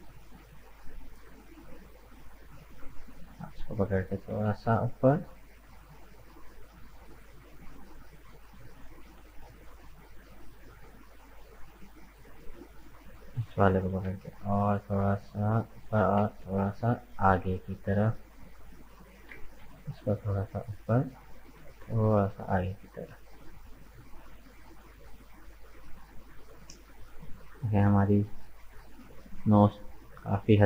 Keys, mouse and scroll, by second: 0.0-2.7 middle drag, 2.7 right click, 3.1 middle click, 4.0 g, 6.5-8.1 middle drag, 8.1 right click, 8.5-10.0 middle drag, 10.0 scroll up 3, 10.4-12.9 middle drag, 12.9 right click, 13.6 g, 16.0 g, 18.6 right click, 19.3 g, 21.5 g, 23.2 scroll down 2, 23.5-25.1 middle drag, 25.1 scroll up 3, 25.5-28.5 middle drag, 29.9 right click, 30.6 shift+right click.